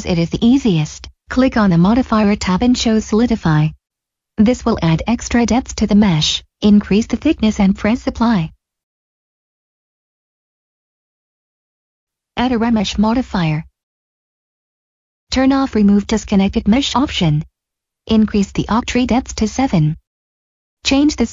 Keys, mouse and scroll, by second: 1.0 click, 4.0 middle click, 7.4 click, 9.6 middle click, 11.2 click, 12.4 click, 15.7 click, 18.7 middle click, 19.8 click.